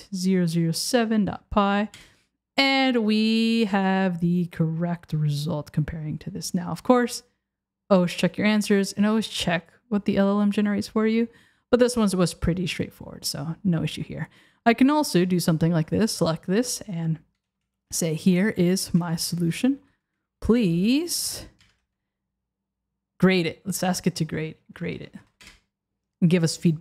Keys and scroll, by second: 2.0 Return, 21.6 BackSpace, 25.5 Return.